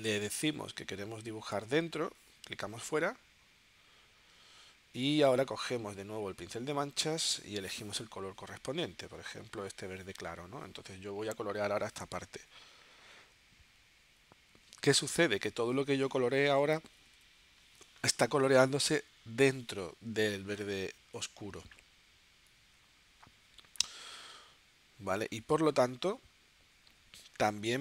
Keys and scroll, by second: 16.1 super+z, 16.8 9, 20.9 super+z.